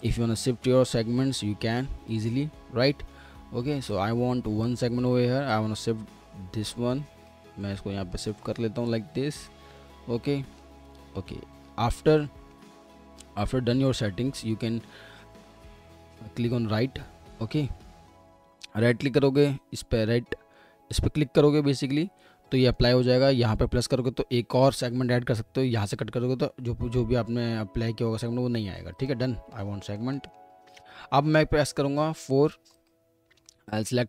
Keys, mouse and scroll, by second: 2.5 ctrl+z, 7.6 alt+middle click, 10.9 alt+middle click, 12.2 alt+middle click, 22.5 middle click, 29.5 alt+middle click, 30.8-32.0 scroll up 1, 31.8-33.3 typing, 33.5 alt+middle click.